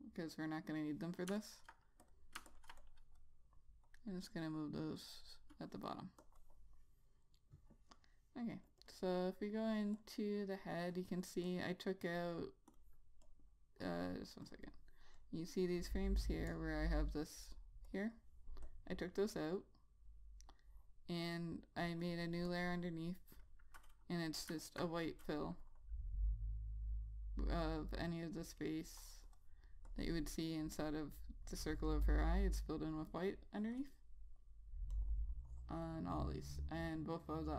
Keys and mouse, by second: 1.7 ctrl+click, 9.3 double click, 10.3 click, 14.9 double click, 15.5 click, 25.0 alt+click.